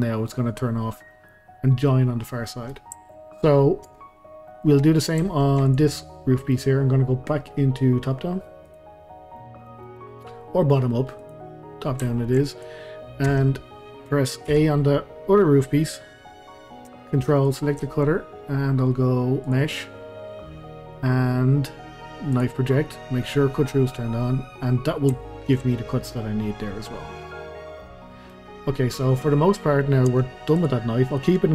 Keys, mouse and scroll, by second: 0.7-1.1 scroll down 1, 1.1-2.1 middle drag, 2.1 scroll down 1, 2.4 scroll up 1, 2.5-3.9 middle drag, 3.9 Tab, 4.2 scroll up 1, 4.5 middle click, 5.0-5.3 scroll down 1, 5.3-5.7 shift+middle drag, 5.7 click, 5.9-8.7 middle drag, 8.7 click, 9.4-11.2 middle drag, 11.2 click, 11.8-12.1 scroll up 1, 12.1-12.5 shift+middle drag, 12.5 click, 13.3 Tab, 14.5 a, 17.5 ctrl+click, 19.4-22.5 drag, 24.3-24.7 scroll down 2, 24.7-25.2 scroll up 2, 25.2-25.9 shift+middle drag, 25.9-27.0 scroll down 2, 27.0-27.8 scroll down 1, 27.8-28.5 middle drag, 28.5 scroll down 2, 28.8-30.1 middle drag, 30.1 Tab, 30.5 click, 31.2-31.5 middle drag.